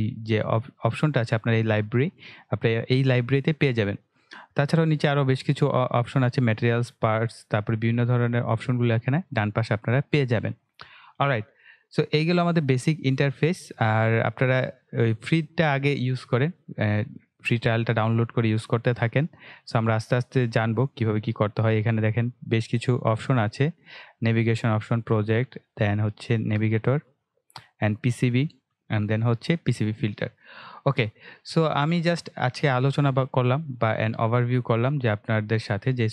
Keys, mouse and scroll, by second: 1.0-1.6 scroll down 1, 20.0-21.1 scroll down 1, 21.1 click, 22.7 click, 34.7 scroll down 1, 35.4-35.9 scroll up 1.